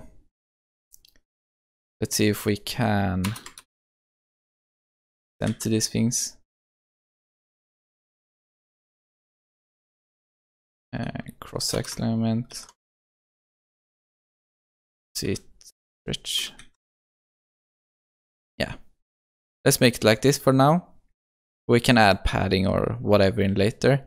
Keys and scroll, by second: 3.3 Return, 5.4 Return, 5.6 ctrl+s, 11.8 Return, 16.3 Return, 16.7 ctrl+s.